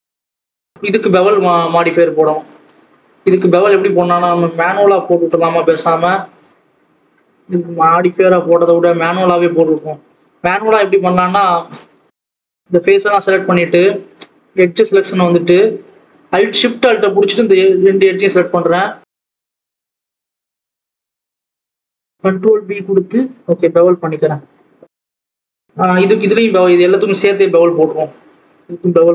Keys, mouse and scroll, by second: 0.7 click, 4.4-5.6 drag, 5.6-6.1 scroll up 1, 6.1 Tab, 6.6 alt+a, 7.4 click, 7.8 alt+a, 8.9 click, 10.9 shift+click, 11.5 ctrl+z, 11.8 shift+click, 12.4 shift+click, 13.3 shift+click, 14.4 click, 16.0 alt+shift+click, 16.9 alt+shift+click, 17.7 alt+shift+click, 18.6 alt+shift+click, 18.8 ctrl+z, 19.0 alt+shift+click, 19.3 alt+shift+click, 20.1 alt+shift+click, 20.5 alt+shift+click, 21.5 ctrl+z, 21.8 alt+shift+click, 22.2 ctrl+b, 24.2 scroll down 2, 24.5 Tab, 24.6-25.1 scroll up 1, 25.1 right click, 25.2 scroll down 1, 25.3 alt+a, 25.4 scroll up 1, 25.6 scroll down 7, 25.8 click.